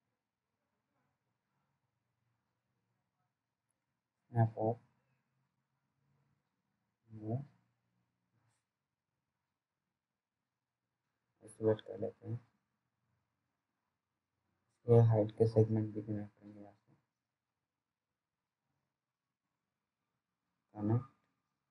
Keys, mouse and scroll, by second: 1.4 ctrl+z, 2.6-4.4 scroll up 1, 4.6 s, 5.1 click, 7.2-7.5 scroll down 1, 8.5 right click, 9.3 click, 11.8 alt+middle click, 12.4 click, 13.9 f, 14.6-15.7 scroll down 1, 15.7 g, 18.1 click.